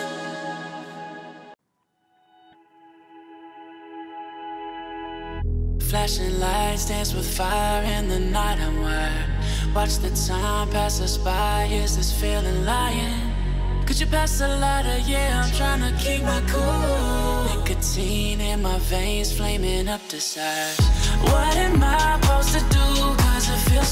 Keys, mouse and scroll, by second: 1.3 click, 2.7 alt+scroll up 1, 3.7 click, 4.9 alt+scroll down 1, 6.0 click, 9.6 click, 12.7 Up, 19.1 click.